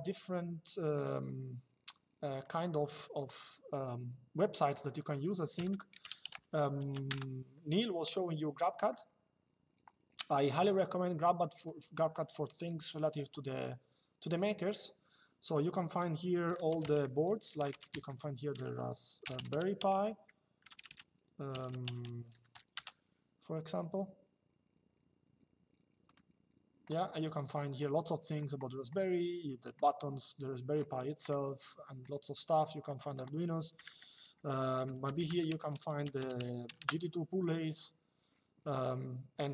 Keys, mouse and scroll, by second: 0.7 click, 2.0 click, 6.8 KP_Enter, 11.2 click, 17.3 BackSpace, 17.5 s, 20.3 BackSpace, 21.2 r, 21.8 space, 22.0 p, 22.5 Return, 25.8 click, 32.5 click, 34.3 p, 35.3 y, 35.8 space, 35.9 g, 36.5 KP_Enter, 39.4 click.